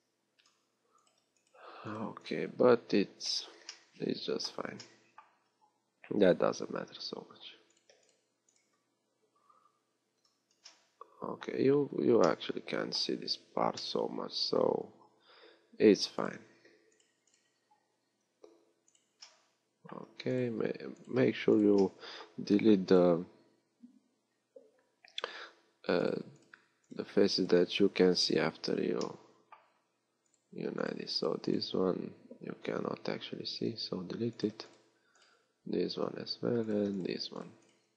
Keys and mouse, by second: 0.0 x, 3.0-5.3 right drag, 3.0 x, 5.5 z, 6.6 x, 7.5 z, 8.9-12.5 right drag, 14.2 middle click, 15.3 z, 28.6 f, 29.8 z.